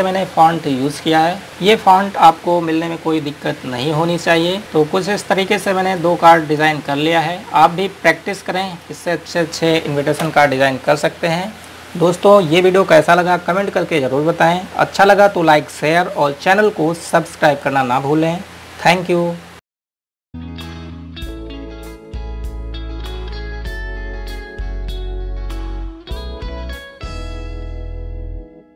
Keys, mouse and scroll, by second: 0.4 scroll down 1, 1.2 click, 4.6 click.